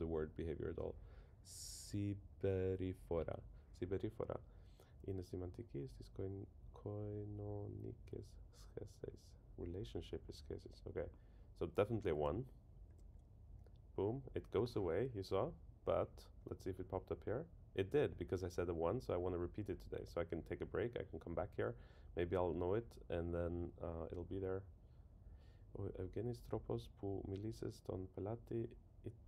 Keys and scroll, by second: 12.9 super+1.